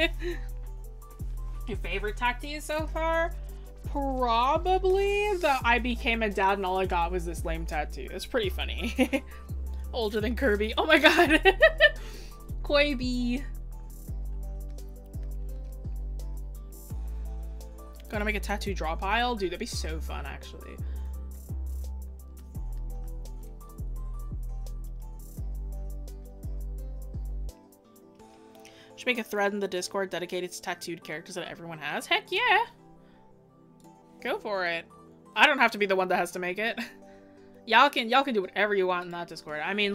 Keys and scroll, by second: 18.5 scroll down 1.